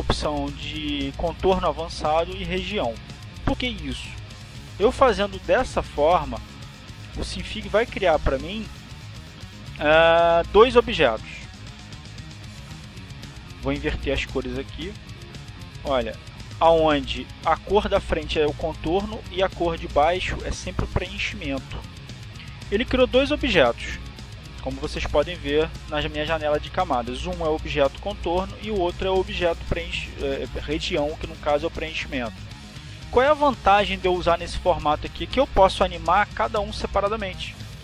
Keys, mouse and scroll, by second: 0.4 click, 4.0 click, 5.8 click, 7.9 click, 11.2-12.2 drag, 15.1-16.2 drag, 17.0 click, 19.3-20.4 drag.